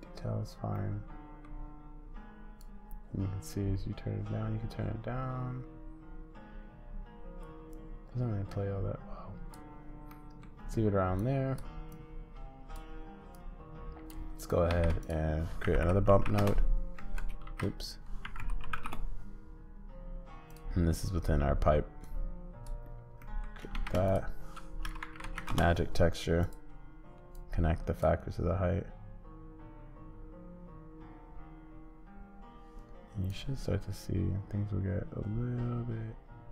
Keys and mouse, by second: 0.8 middle click, 2.6-10.2 drag, 10.2 middle click, 11.2-12.8 drag, 13.3 click, 14.4 click, 14.7 shift+a, 17.4 shift+a, 22.1 click, 23.3 middle click, 23.7 shift+a, 27.4-36.5 drag.